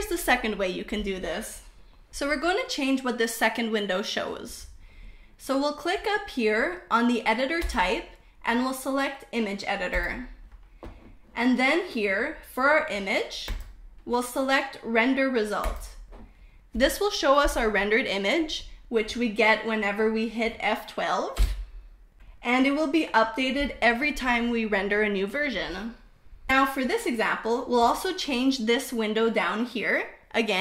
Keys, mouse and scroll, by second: 6.2-9.5 drag, 12.6-15.2 drag.